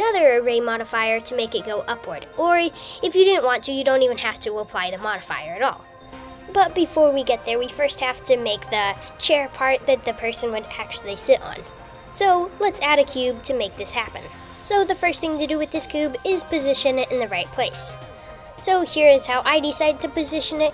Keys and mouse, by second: 12.1 click, 13.4 shift+a, 16.8 g, 19.4 g.